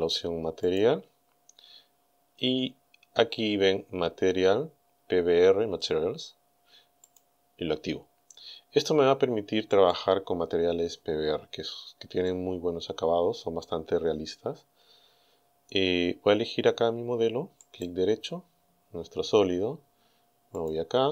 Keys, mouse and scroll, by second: 0.7 click, 2.0-2.3 scroll up 1, 7.1 click, 9.7 click, 12.3-13.7 middle drag, 13.7-14.6 scroll up 3, 14.7 scroll down 2, 17.6 right click, 20.6 click.